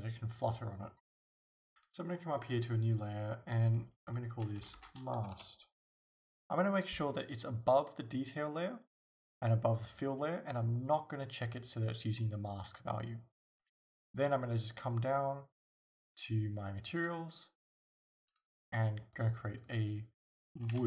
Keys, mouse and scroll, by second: 1.8 click, 3.0-17.1 drag, 18.3 click, 19.2-20.8 drag.